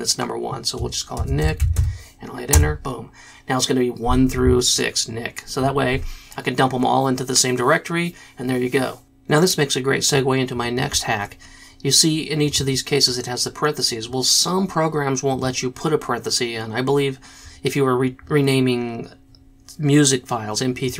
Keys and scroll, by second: 0.9-2.2 typing, 2.5 Return.